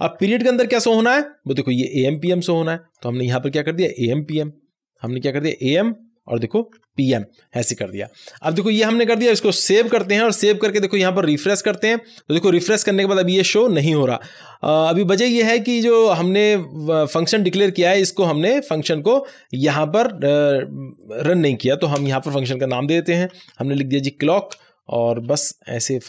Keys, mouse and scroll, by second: 2.1-5.5 drag, 5.5-7.6 typing, 8.2 click, 9.7 ctrl+s, 11.5 click, 16.0 click, 16.0 scroll up 1, 17.6-19.9 drag, 19.9-20.9 scroll down 1, 20.9 click, 21.9 Return, 22.9-24.0 typing, 24.4 Return, 25.6 shift+9.